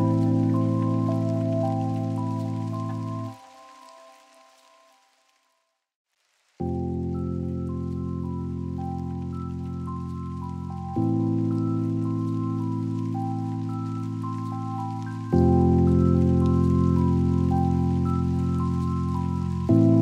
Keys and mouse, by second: 2.4 click, 4.6 g, 5.0 z, 9.0 shift+click, 14.7 click, 18.6-20.0 drag.